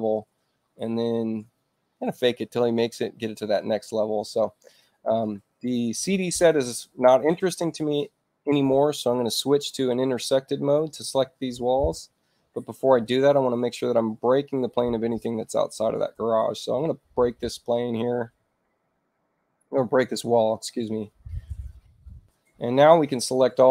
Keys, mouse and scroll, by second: 3.0 shift+u, 4.1 shift+i, 4.5 shift+i, 11.0 click, 18.2 o, 19.4 click.